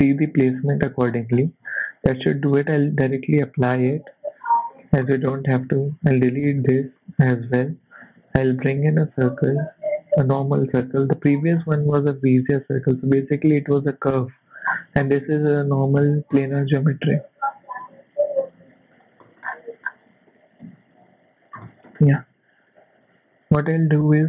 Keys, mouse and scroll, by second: 1.1-2.8 scroll down 8, 2.8 click, 3.4 click, 3.9 z, 4.7 g, 5.8 click, 6.4 x, 6.9 shift+middle click, 7.2 shift+scroll up 3, 7.8 shift+a, 11.2-11.7 scroll down 6, 12.2 s, 13.5 g, 14.6-15.2 scroll up 5, 15.7 g, 17.5 s, 19.2 shift+middle click, 19.4-20.1 shift+scroll up 6, 20.2 g, 21.6 shift+middle click, 22.0 scroll up 1, 22.7 Tab.